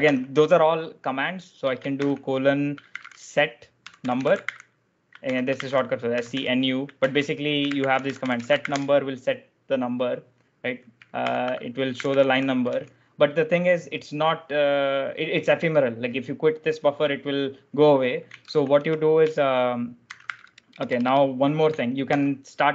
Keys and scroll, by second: 0.0 shift+;, 1.6-9.1 typing, 6.9 ctrl+u, 11.1 ctrl+d, 11.2 ctrl+d, 11.6-12.9 typing, 14.0 typing, 18.4 shift+;, 18.7 BackSpace, 19.7-20.9 typing, 22.0 shift+;.